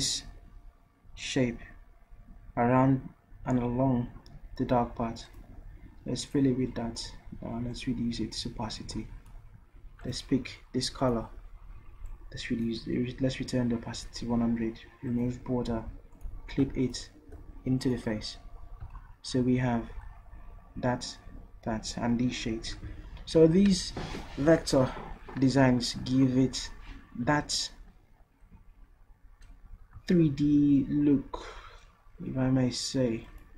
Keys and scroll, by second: 15.7 v.